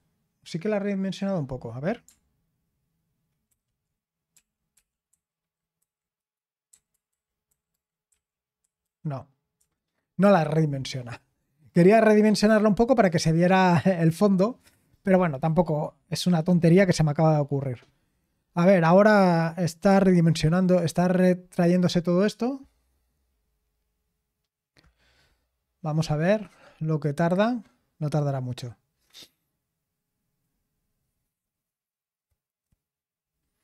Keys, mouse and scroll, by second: 3.5 super+r, 4.3-6.7 typing, 8.1-8.8 typing, 9.6 Escape.